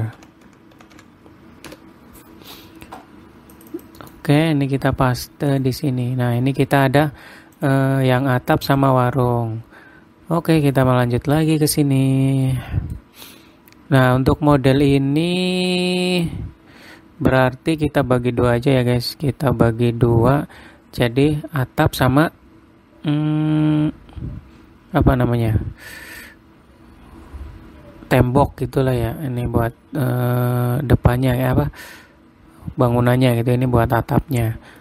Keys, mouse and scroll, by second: 13.0 middle click, 13.6-15.8 scroll up 1, 15.8 middle click, 28.8 middle click, 30.3 middle click, 31.9 middle click, 33.6 middle click.